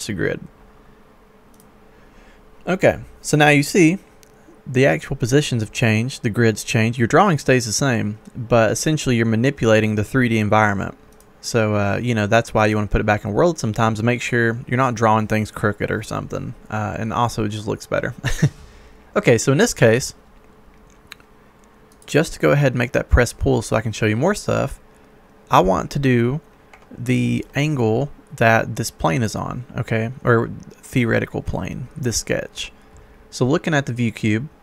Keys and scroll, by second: 26.7 Escape.